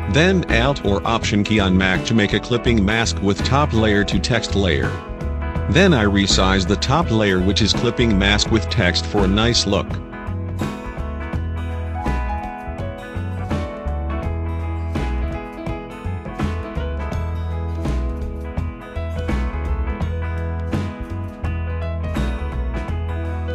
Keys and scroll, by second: 9.4 ctrl+t.